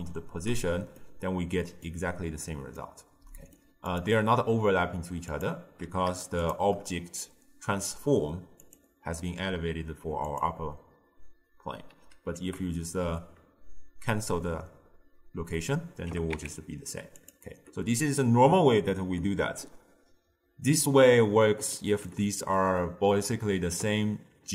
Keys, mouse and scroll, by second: 1.1-4.0 middle drag, 4.0 click, 5.4 click, 6.5 shift+click, 8.7 click, 10.3 click, 12.4 alt+g, 16.2 g, 21.8-24.5 middle drag.